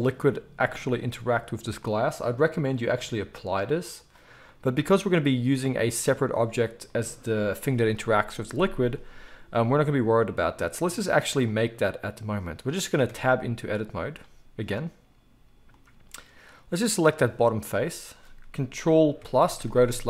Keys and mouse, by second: 7.9 KP_1, 11.6-14.1 middle drag, 14.1-17.1 right drag, 15.0 Tab, 17.1 middle click, 17.8-20.0 right drag.